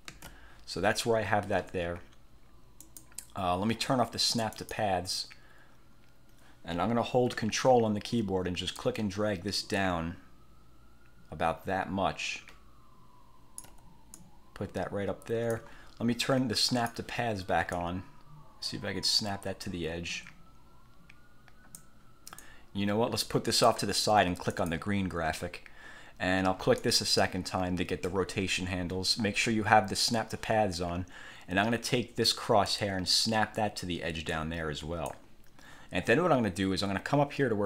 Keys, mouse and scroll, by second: 0.2 ctrl+z, 2.9 click, 4.6 click, 8.9-14.0 ctrl+drag, 14.3-15.9 drag, 16.8 click, 17.9 click, 22.5-24.0 drag, 24.6 click, 26.9 click, 32.8-35.4 drag.